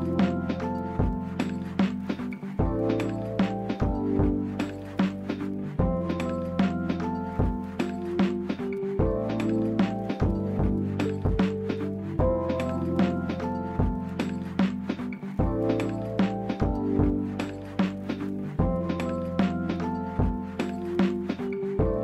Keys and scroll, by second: 5.3 z, 7.5 c, 9.0 Escape, 9.1 p, 11.3 c, 14.4 p, 17.0 l.